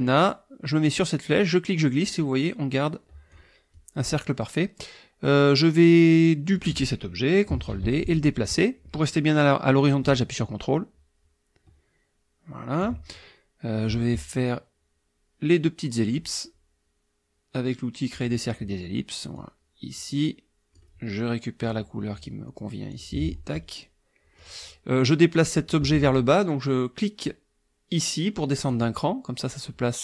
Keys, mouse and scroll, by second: 1.3-3.5 drag, 3.7-6.7 drag, 7.7 ctrl+d, 8.0-13.0 ctrl+drag, 18.1 click, 19.3-20.9 drag, 21.6 click, 22.9 click, 24.4 click, 28.7 click.